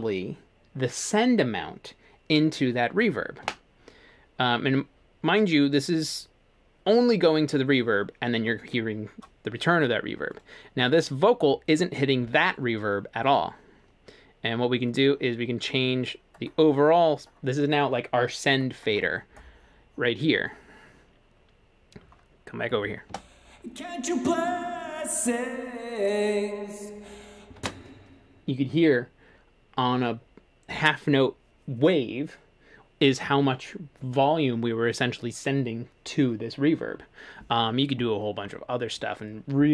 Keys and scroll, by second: 3.5 F3, 23.1 space, 27.6 space.